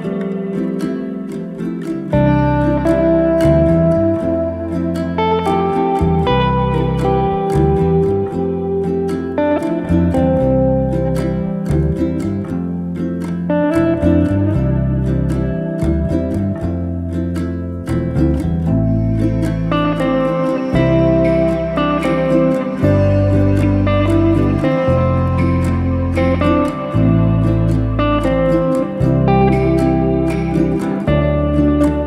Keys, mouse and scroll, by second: 3.6 scroll up 2, 3.9-5.4 middle drag, 5.8 alt+e, 14.3-15.0 middle drag, 16.9 alt+e, 19.4 scroll down 1, 19.6 middle click, 20.6 drag, 20.8-21.8 middle drag, 21.8 scroll down 2, 22.0-22.5 middle drag, 22.5-22.9 scroll up 2, 22.9-24.4 middle drag, 24.9 click, 25.4 ctrl+z, 25.7 ctrl+z, 25.9-27.4 middle drag, 28.8 drag, 29.5 Tab, 29.7 click, 30.3 Tab, 30.9 Tab, 31.0 click, 31.4 Tab, 31.8 Tab.